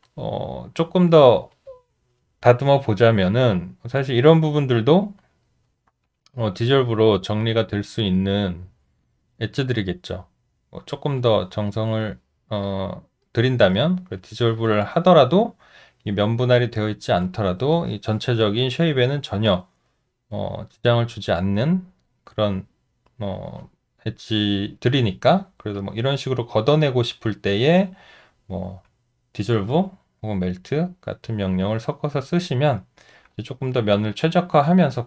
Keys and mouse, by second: 6.1 shift+click, 6.8 shift+click, 7.4 shift+click, 8.5 shift+click, 9.1 shift+click, 10.8 shift+click, 25.8 alt+click, 31.0 alt+middle click, 31.8 alt+right click, 32.7 alt+middle click.